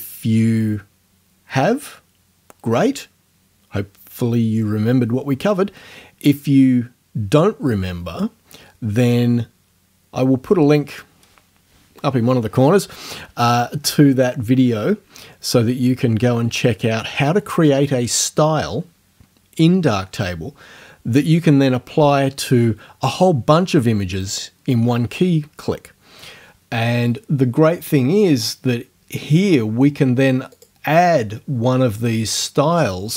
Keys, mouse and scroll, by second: 30.5 click.